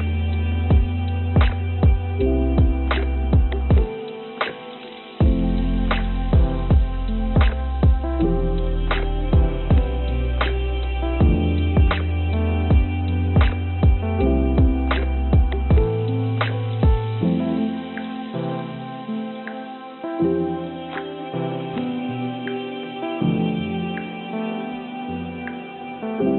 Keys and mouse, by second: 0.8 shift+d, 5.4 x, 6.3 g, 10.3 g, 14.2 click, 16.8 g, 19.6 g, 22.5 g, 24.8-26.3 drag.